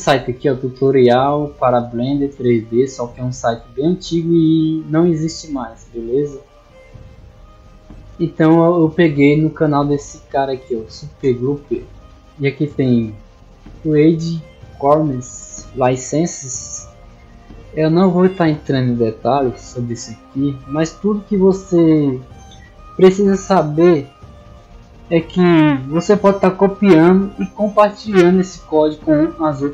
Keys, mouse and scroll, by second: 0.1-1.9 drag, 2.4 click, 2.8-5.3 drag, 5.7 click, 6.8 middle click, 9.0 click, 10.4 click, 11.2-12.2 drag, 13.2-15.2 drag, 15.6 middle click, 17.3 click.